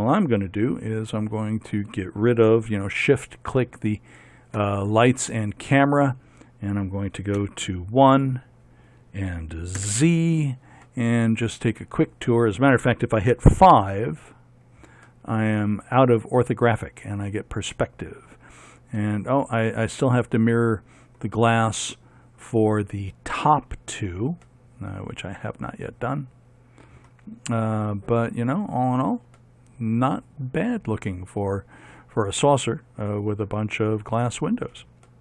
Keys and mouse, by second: 4.3-7.6 drag, 7.6 KP_1, 10.0 z, 13.5 KP_5, 19.2-24.5 middle drag, 24.7 middle click, 26.7-28.4 middle drag, 28.5 middle click, 30.4 middle click.